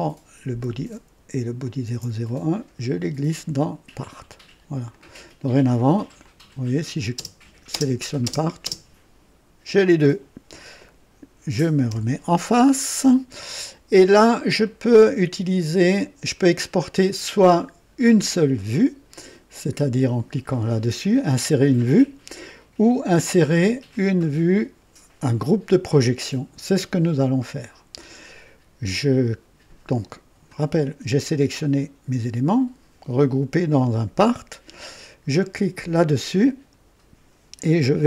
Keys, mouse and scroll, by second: 1.6 ctrl+click, 2.2-3.5 ctrl+drag, 4.8 click, 5.5 click, 6.2-7.0 drag, 7.1 space, 7.7 space, 8.2 space, 8.6 space, 12.0 KP_1, 13.7 scroll up 1, 14.6-15.7 right drag, 16.4 scroll down 1, 35.7 click.